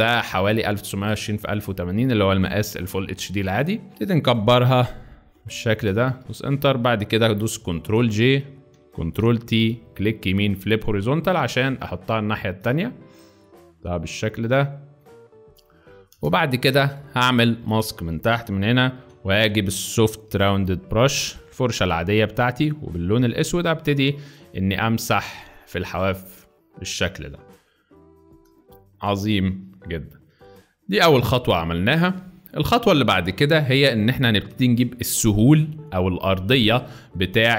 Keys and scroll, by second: 6.2 Return, 7.9 ctrl+j, 9.1 ctrl+t, 16.2 shift+Return, 19.0 b, 20.3 [, 20.5 [, 20.8 [, 21.0 [, 22.1 [, 23.2 x, 28.6 space, 31.1 z.